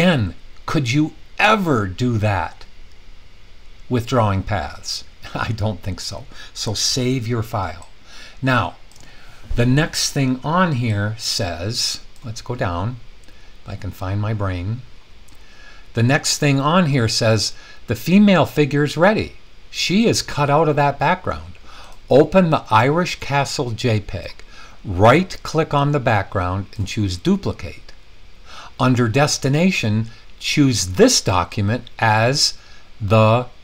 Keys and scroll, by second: 6.9 super+s.